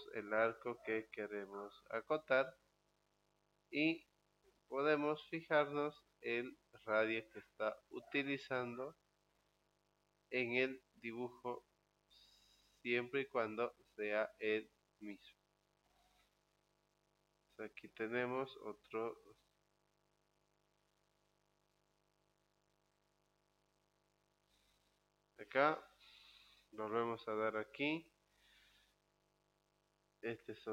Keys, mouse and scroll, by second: 2.1 click, 6.2 click, 9.9 click, 12.6 click, 15.8 click, 24.2 click, 27.8 click, 30.2 click.